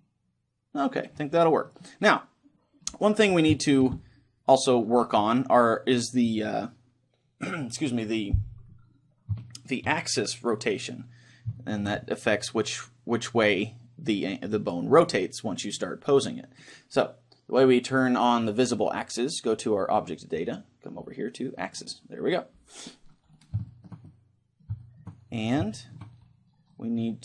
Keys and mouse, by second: 3.1 a, 9.5-13.3 middle drag, 18.5-20.4 drag, 21.7-23.5 drag, 23.5-27.2 middle drag.